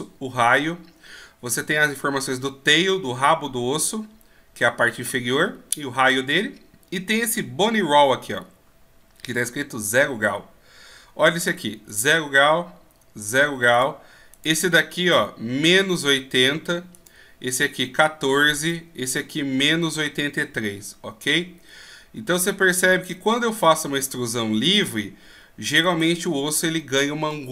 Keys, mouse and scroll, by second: 11.9 right click, 13.8 right click, 22.9 right click, 24.6 right click.